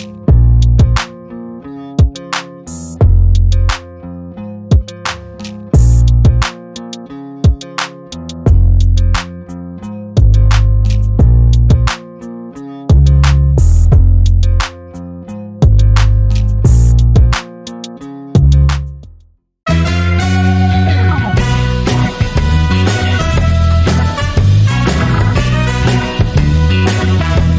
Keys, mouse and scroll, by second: 2.4-7.7 drag, 11.3 click, 12.0 right click, 13.3 click, 15.6 click.